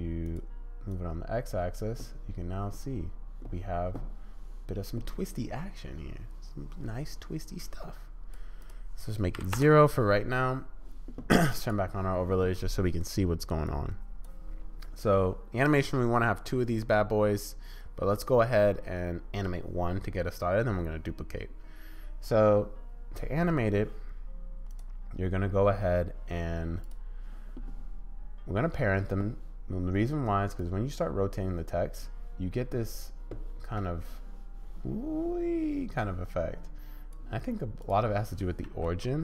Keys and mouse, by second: 0.2 click, 0.9-3.4 drag, 4.7 click, 6.4-8.4 middle drag, 8.6-10.1 middle drag, 11.6 middle click, 13.7 click, 24.7 middle click, 26.8 click, 30.6-32.7 drag, 34.1-37.2 middle drag, 37.8-39.2 middle drag.